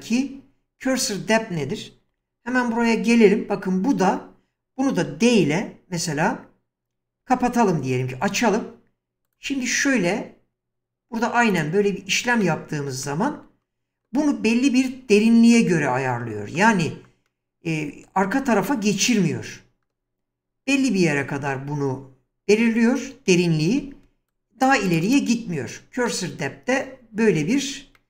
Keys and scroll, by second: 2.1 1, 7.2 d, 23.7 <.